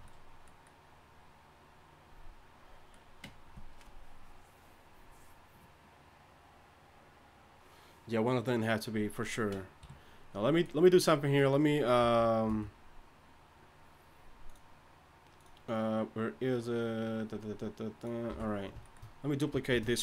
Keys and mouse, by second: 9.8 KP_3, 12.0 n, 12.5 n, 18.3 n, 19.7 shift+d.